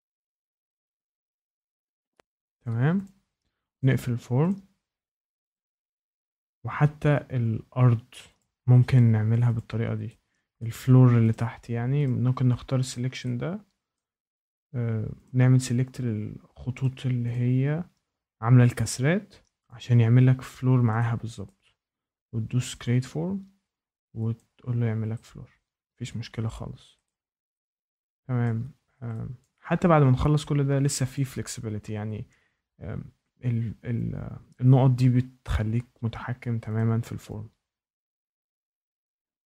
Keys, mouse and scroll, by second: 0.4 click, 0.7 ctrl+click, 0.8 ctrl+click, 1.2 click, 1.6 click, 1.8 click, 2.2 click, 2.6 click, 3.0 click, 3.7 ctrl+click, 4.4 ctrl+click, 5.5 ctrl+click, 6.2 ctrl+click, 8.3 click, 9.5 click, 10.5 shift+middle click, 11.3 click, 12.0 ctrl+click, 12.6 scroll down 1, 12.6 scroll up 5, 12.8 scroll down 1, 12.9 scroll up 1, 12.9 scroll down 8, 13.0 scroll up 8, 13.1 scroll down 8, 13.2 scroll up 8, 13.2 scroll, 13.4-13.7 scroll down 3, 13.9 shift+middle click, 14.2 scroll, 15.2 ctrl+click, 15.9 ctrl+click, 16.8 ctrl+click, 17.3 ctrl+click, 17.7 scroll, 18.1 scroll up 5, 18.8 ctrl+click, 19.5 scroll down 1, 19.6 ctrl+click, 19.6 scroll up 1, 20.4 ctrl+click, 20.8 scroll, 21.0 scroll down 1, 21.4 shift+middle click, 21.6 scroll up 1, 22.2 scroll, 22.8 click, 24.3 click, 26.3 shift+right click, 26.6 scroll, 27.5 shift+right click, 28.4 shift+middle click, 28.7 scroll, 29.4 shift+middle click, 29.6-31.1 scroll, 31.1 click, 35.4 scroll, 35.4 click, 36.7 click, 38.2 click.